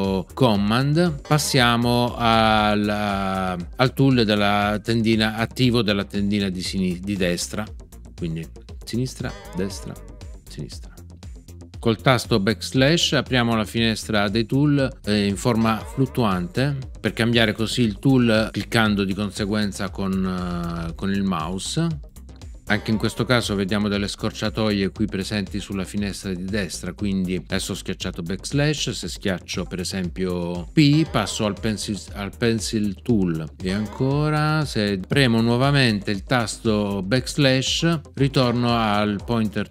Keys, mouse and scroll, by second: 15.5 \, 22.6 \, 30.9 p, 33.6 \, 38.3 \.